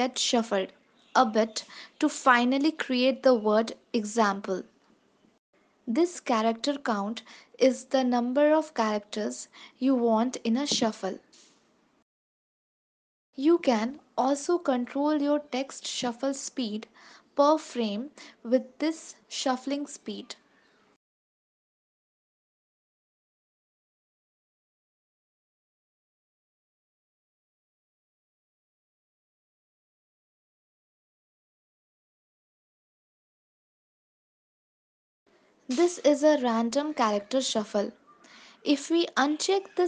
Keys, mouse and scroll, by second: 1.9 space, 3.0 ctrl+s, 5.4 space, 7.5 click, 7.5 space, 8.0 KP_0, 9.9 click, 10.5 ctrl+s, 10.8 space, 13.3 space, 16.7 click, 17.5 click, 17.9 space, 22.2 space, 23.1 ctrl+s, 25.0 click, 25.2-25.7 click, 25.4 click, 25.5 click, 25.9 click, 26.0 click, 26.4 click, 26.5 click, 28.4 click, 29.4 ctrl+s, 30.3 space, 35.2 space, 35.4 click, 36.1 click, 37.5 click, 39.3 click.